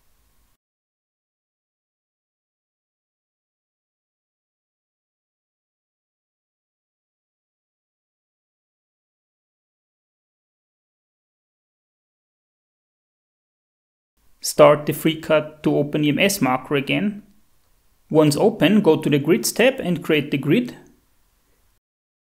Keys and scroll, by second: 0.0-0.5 typing, 1.2 Up, 1.5 Down, 1.6 Tab, 3.1-7.7 typing, 6.4 Left, 10.3 Tab, 10.4 Up, 10.8-11.8 typing, 21.5-22.3 typing.